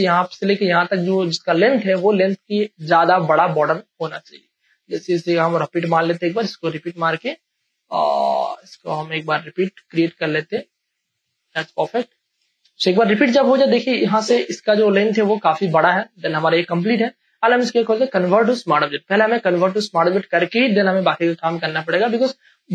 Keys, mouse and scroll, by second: 2.0 space, 2.2 click, 2.5 space, 4.9 click, 4.9 alt+click, 5.9 shift+space, 6.1-8.7 ctrl+drag, 8.7 shift+space, 8.9 ctrl+click, 9.4-11.5 drag, 11.5 space, 11.8 ctrl+click, 12.1 ctrl+e, 12.6 ctrl+space, 12.6 ctrl+click, 13.4 ctrl+space, 15.8 ctrl+space, 16.0 ctrl+click, 16.8 space, 17.0 ctrl+click, 18.2 right click, 20.1 click.